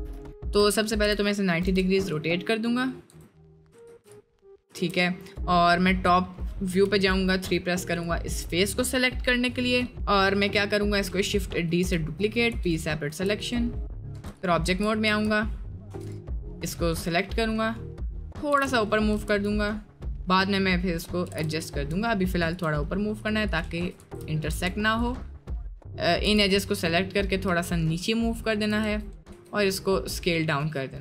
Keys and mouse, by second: 0.1 Tab, 1.0 r, 3.1 Tab, 3.9 ctrl+r, 5.2 click, 5.7 middle click, 6.8 3, 7.9 click, 11.9 shift+d, 12.5 p, 13.1 1, 13.4 click, 14.1 `, 14.6 click, 15.9 Tab, 16.1 drag, 16.3-16.6 middle drag, 16.9 middle click, 18.5 g, 21.3 g, 23.2 click, 24.0 ctrl+z, 24.5 Tab, 25.1 click, 26.2 g, 28.8 Tab, 29.3 s.